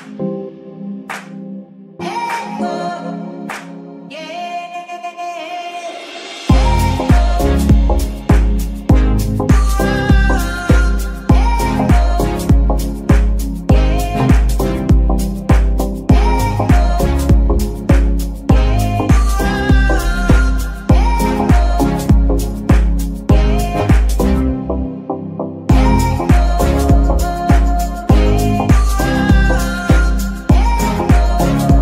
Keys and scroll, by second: 0.5 n, 12.0 space, 20.4 space, 22.7 space, 30.8 ctrl+Tab.